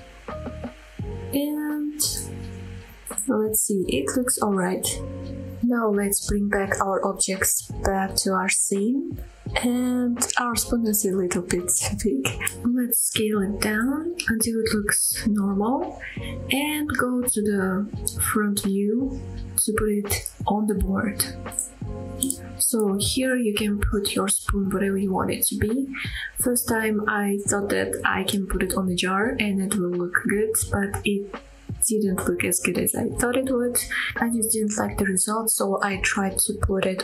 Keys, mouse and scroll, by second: 1.3 click, 1.9-2.3 scroll down 1, 2.3-3.3 middle drag, 3.5 shift+middle click, 4.3 Tab, 4.7 scroll down 1, 4.9-5.4 middle drag, 5.5-6.0 scroll up 2, 6.0 click, 6.0 right click, 6.0 scroll down 1, 6.3 middle click, 8.4 click, 9.5 click, 10.0-10.4 scroll up 2, 10.4 middle drag, 10.9 click, 11.5 s, 15.2 click, 15.5-16.1 scroll up 4, 16.1-18.0 middle drag, 19.1 KP_1, 19.6 scroll up 1, 20.1-20.8 shift+middle drag, 20.8 g, 22.5 click, 23.0 r, 23.1 z, 23.9 scroll down 1, 23.9 shift+middle click, 24.0 s, 24.3 click, 24.4-24.8 shift+middle drag, 24.8 scroll down 1, 24.8 middle click, 25.2 KP_7, 25.3 g, 25.6 click, 25.7 shift+middle click, 26.3 KP_1, 26.4 r, 27.2 middle click, 27.2 right click, 27.5 KP_3, 27.6 middle click, 27.7 KP_3, 27.8-28.1 scroll up 2, 28.0 r, 28.8 middle click, 28.8 click, 29.1-30.6 typing, 29.6 click, 30.2 click, 30.6 click, 31.3 click, 31.4-32.0 middle drag, 32.0-35.9 typing, 32.9 click, 33.0 middle click, 33.4 middle click, 33.6 scroll up 2, 34.2 shift+drag, 34.3 middle drag, 35.4 shift+drag, 36.5 middle drag, 36.7 scroll down 2, 36.7 shift+middle click, 36.8 click, 36.9 middle click.